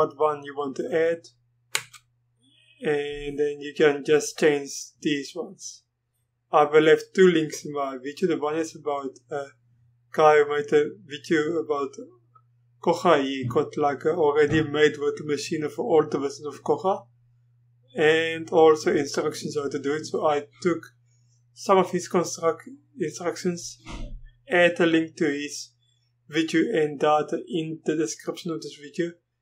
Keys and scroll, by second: 1.7 Return.